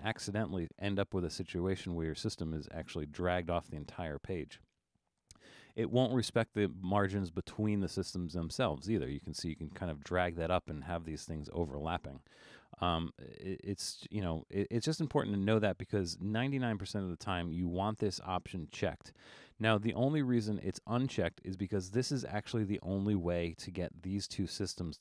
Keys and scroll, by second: 2.7 super+z, 3.4 super+z, 13.8 super+z.